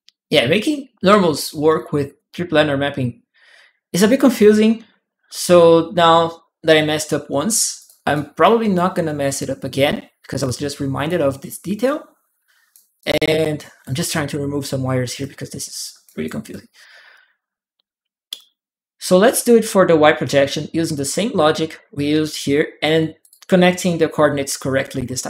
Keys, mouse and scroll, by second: 1.1 right click, 1.2 click, 7.6 click, 7.9 click, 7.9 right click, 9.5 alt+click, 10.2 alt+click, 11.6 alt+click, 12.8 alt+click, 13.9 alt+click, 14.0-16.0 alt+right drag, 14.1 alt+click, 15.0 click, 16.3 right click, 16.9 right click, 23.0 click, 24.7 ctrl+w.